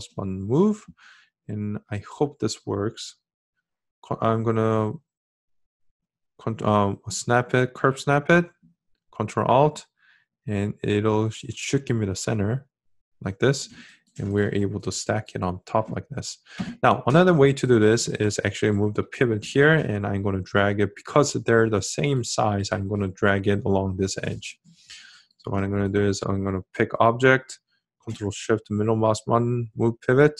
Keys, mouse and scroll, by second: 6.8-12.3 ctrl+alt+drag, 28.0-30.3 ctrl+shift+middle drag.